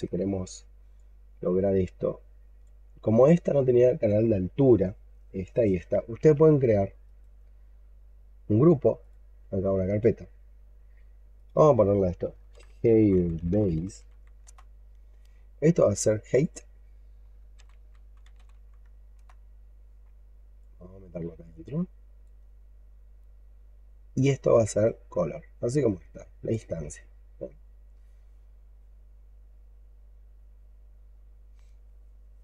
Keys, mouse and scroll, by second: 0.0-0.7 scroll up 5, 0.8 alt+click, 2.7-5.8 alt+scroll down 1, 6.9 right click, 11.4 double click, 12.4-14.0 typing, 14.3 Return, 16.3 double click, 17.2-18.9 typing, 19.0 Return.